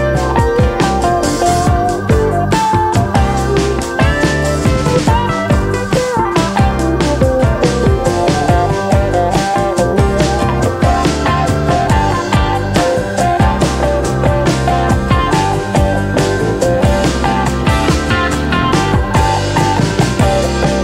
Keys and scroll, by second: 5.0-5.9 typing, 15.9 typing.